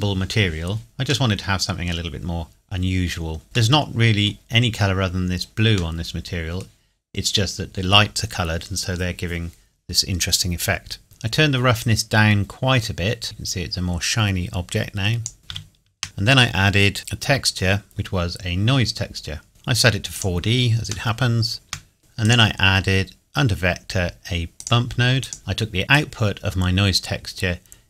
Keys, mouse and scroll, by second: 0.9-1.2 scroll down 1, 1.2 middle click, 5.6-5.9 scroll down 1, 5.9 middle click, 11.0 shift+middle click, 11.8 click, 15.4 scroll up 1, 15.4 shift+a, 19.5 click, 20.7 scroll down 1, 21.0 shift+middle click, 22.0 click, 24.5 click, 25.4-25.9 scroll up 2, 25.9 click.